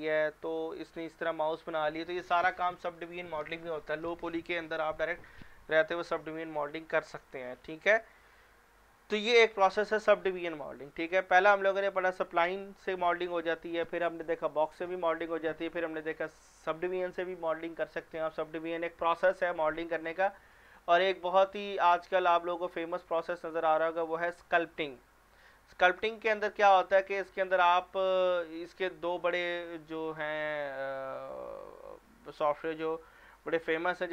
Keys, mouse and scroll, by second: 0.2-0.7 scroll down 1, 0.8 click, 7.1 scroll down 1, 11.1 click, 22.8 click, 24.5 click.